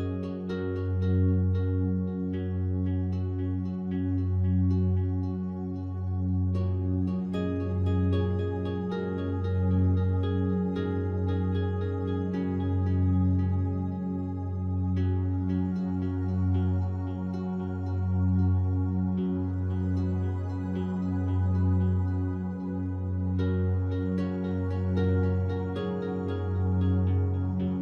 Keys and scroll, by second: 6.9 space, 7.8 space, 10.5 space, 11.5 space, 12.6 space, 16.1 space, 18.6 space, 26.6 space.